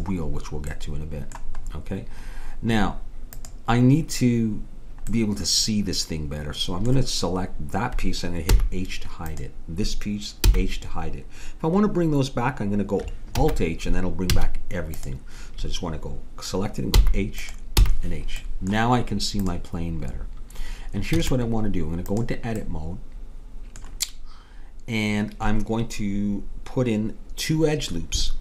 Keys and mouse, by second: 0.7-3.4 middle drag, 3.4-5.3 drag, 5.3 middle click, 8.5 h, 9.3-11.0 drag, 10.5 h, 13.4 alt+h, 14.4 a, 15.0-16.8 drag, 17.0 h, 17.5-21.2 drag, 17.8 h, 21.2 Tab.